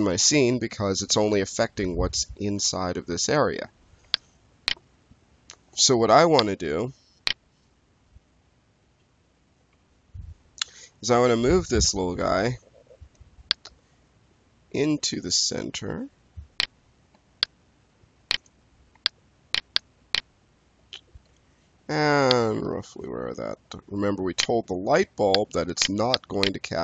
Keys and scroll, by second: 5.6 space, 12.1 w, 17.0 space, 21.1 4.